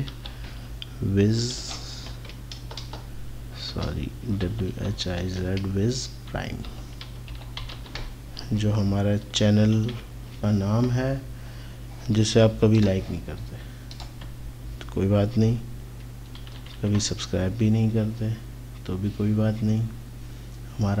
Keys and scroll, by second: 0.1-2.6 typing, 3.7-7.7 typing, 9.8 ctrl+a, 16.4 ctrl+c, 16.8 typing.